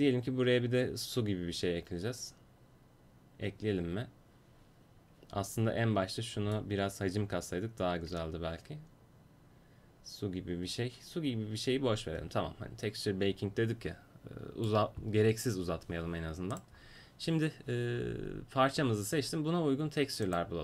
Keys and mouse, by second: 6.6-8.5 middle drag, 16.6-18.8 right drag.